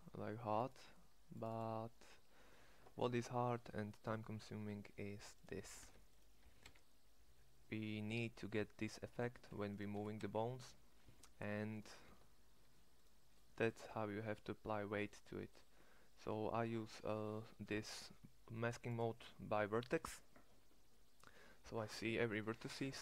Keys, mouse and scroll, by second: 3.0 click, 5.8 ctrl+Tab, 6.4 g, 9.1 g, 9.9 g, 12.2 ctrl+Tab, 19.5-21.1 drag, 22.0-23.0 drag.